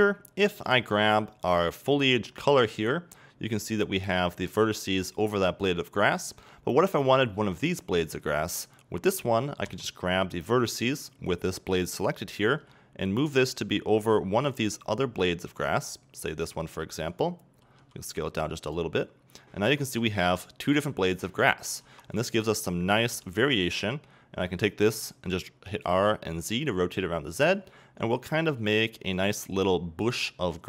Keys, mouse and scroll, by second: 9.1-9.7 middle drag, 12.1 middle click, 19.3 scroll up 2, 19.9 Tab, 20.1-21.5 scroll up 2, 21.5 scroll down 2, 22.3 right click, 23.5 middle click, 27.5 middle click, 29.2 middle click.